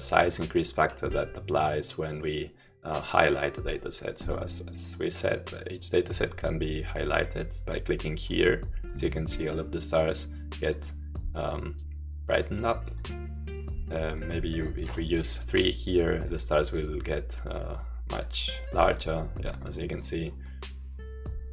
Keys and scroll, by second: 14.9 3.